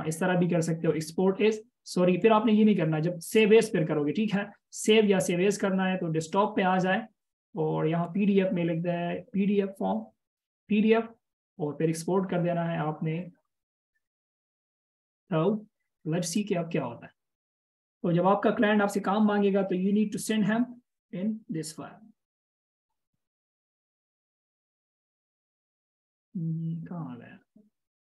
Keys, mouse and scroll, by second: 19.0 double click, 20.8 right click, 27.2 double click.